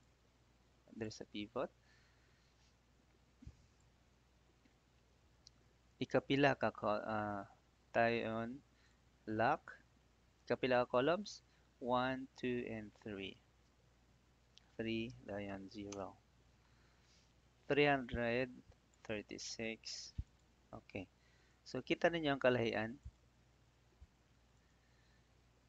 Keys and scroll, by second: 9.2 F4, 10.3 ', 14.5 3, 15.8 Return, 19.4 ctrl+d.